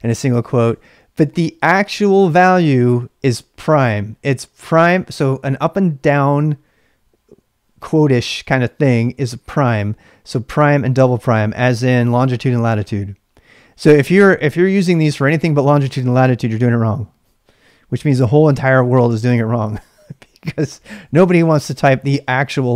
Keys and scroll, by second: 0.0-1.2 typing, 10.5 l, 10.6 l, 14.5 h, 14.7 h, 21.0 ctrl+[, 21.0 ctrl+h.